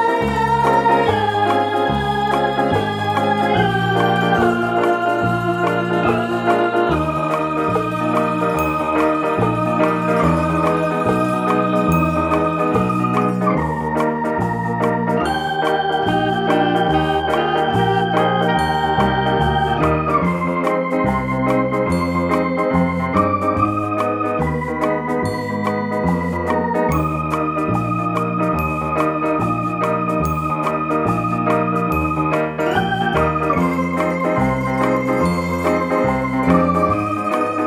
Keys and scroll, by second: 14.4 ctrl+l, 17.5 ctrl+j, 20.7 ctrl+shift+], 23.5 ctrl+t.